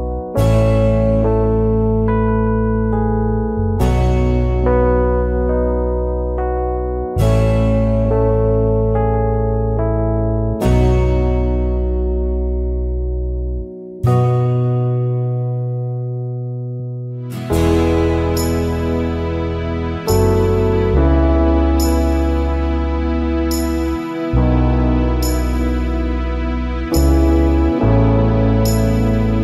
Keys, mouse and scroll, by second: 1.9 alt+scroll down 1, 2.1 space, 2.7 alt+scroll up 1, 5.0 alt+scroll up 1, 5.2 space, 6.8 alt+shift+click, 8.5 ctrl+shift+a, 9.4 alt+scroll down 1, 9.9-10.5 alt+scroll up 2, 11.4 ctrl+shift+a, 11.6 alt+scroll down 1, 11.8 space, 13.0 alt+scroll up 1, 19.0 shift+click, 25.6 shift+click.